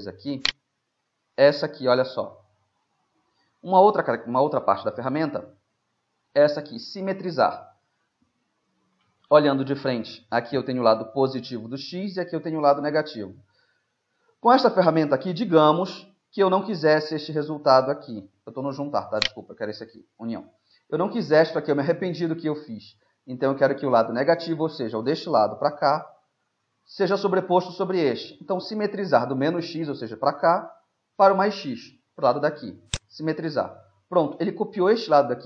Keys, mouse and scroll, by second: 2.2 right click, 2.4-3.9 middle drag, 7.6-13.2 middle drag, 13.8-19.3 middle drag, 19.3-21.9 right drag, 32.9-34.8 drag, 33.6-35.4 middle drag.